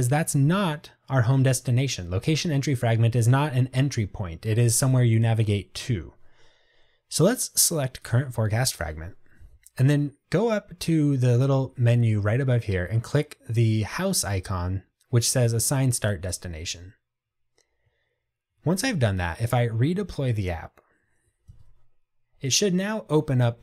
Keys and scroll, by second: 19.6 ctrl+r.